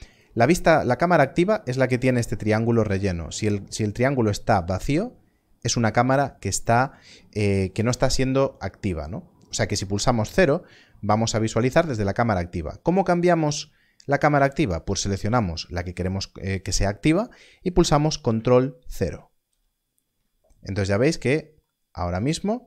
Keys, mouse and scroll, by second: 0.1 click, 5.3 scroll down 1, 12.9 click, 13.6-14.3 scroll up 1, 19.4 ctrl+KP_0, 20.8 scroll down 1, 21.6 scroll down 1.